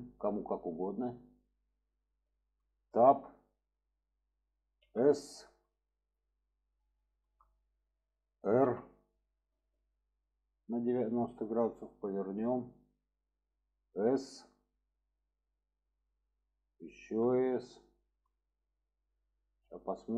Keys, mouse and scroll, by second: 1.4-2.6 middle drag, 3.0 Tab, 4.8 s, 7.0 shift+middle click, 12.7 click, 19.9-20.1 middle drag.